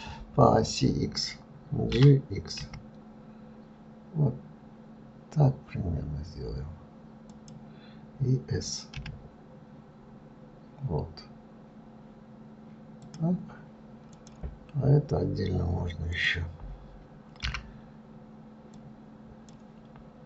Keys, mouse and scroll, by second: 14.4 click, 16.4 click, 17.7 b.